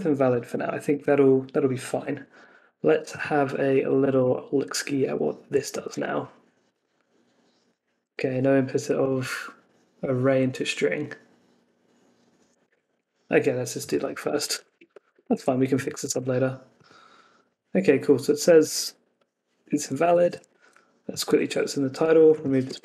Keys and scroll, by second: 4.1 super+s, 5.9 super+r, 12.6 super+Tab, 15.0 Escape, 15.3 super+s, 16.0 super+r, 20.5 super+c, 21.4 super+v.